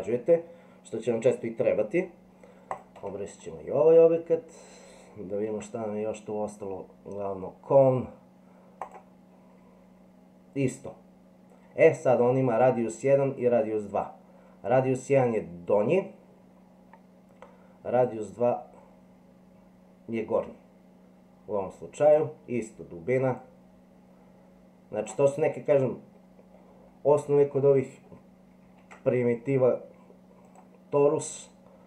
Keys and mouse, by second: 2.7 click, 3.0 Delete, 5.5 shift+a, 18.0-22.1 drag, 23.3-25.0 drag, 27.1 Delete, 28.7 shift+a.